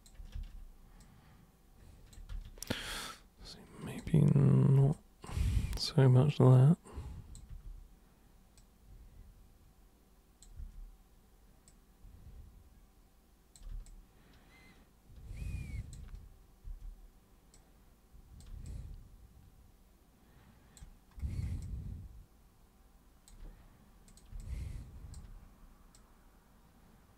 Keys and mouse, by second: 0.3 ctrl+super+z, 1.0-2.1 super+drag, 2.3 ctrl+super+z, 2.9-4.0 alt+super+drag, 4.9-5.3 ctrl+shift+super+drag, 6.3 super+click, 7.5 super+e, 8.6-10.4 super+drag, 10.6 super+w, 11.6-13.5 super+drag, 13.9-15.9 alt+super+drag, 16.6 super+w, 17.5 super+click, 18.7-20.8 alt+super+drag, 21.6-23.3 alt+super+drag, 24.1 super+click, 24.4 alt+super+click, 25.9 super+click.